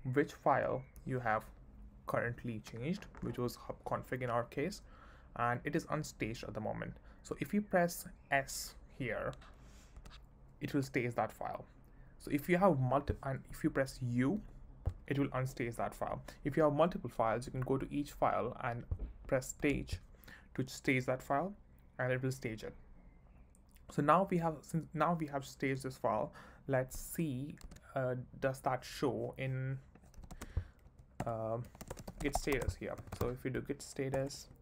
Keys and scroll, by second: 0.6 j, 27.6 super+d, 29.9-34.6 typing, 30.8 Right, 31.2 Return, 33.5 Right.